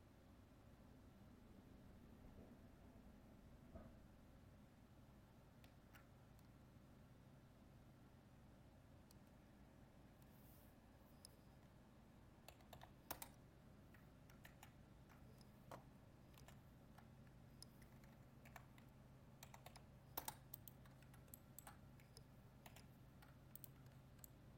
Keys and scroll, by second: 14.5 ctrl+z.